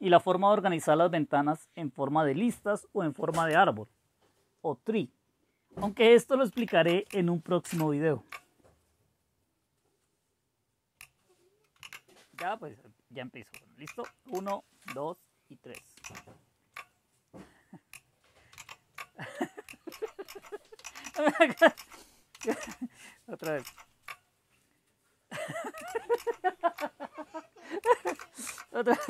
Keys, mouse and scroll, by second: 6.5 super+h, 7.6 super+Return, 11.8 super+w, 13.8 super+Left, 14.3 super+Right, 16.0 super+Down, 18.5 super+s, 19.9 super+Up, 20.3 super+Up, 20.8 super+Down, 21.0 super+Down, 21.5 super+Up, 21.7 super+Up, 22.4 super+Down, 22.6 super+Down, 23.4 super+Up, 23.9 super+Up, 26.2 Up, 28.1 super+Left, 28.5 super+Left, 29.0 super+Right.